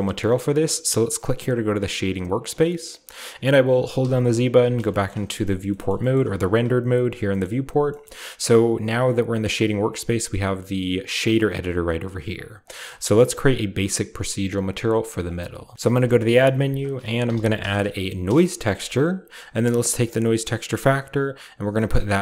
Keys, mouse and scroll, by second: 1.8-4.0 drag, 2.7-4.5 shift+middle drag, 3.0-4.0 shift+scroll up 2, 4.0-4.7 typing, 5.0 shift+scroll up 4, 5.9 shift+middle click, 5.9-7.2 scroll up 1, 6.1-7.3 middle drag, 6.3 typing, 7.4-7.9 shift+middle drag, 7.8-9.4 scroll down 1, 9.4 click, 11.2 click, 11.9 scroll up 2, 12.3 click, 12.6 click, 12.8-14.2 scroll up 1, 15.2 right click, 15.7 ctrl+space, 15.7-16.5 scroll up 1, 15.8 shift+middle click, 15.8 a, 16.5 click, 17.2-17.6 typing, 18.2 Return, 19.3 drag, 20.4-22.2 drag.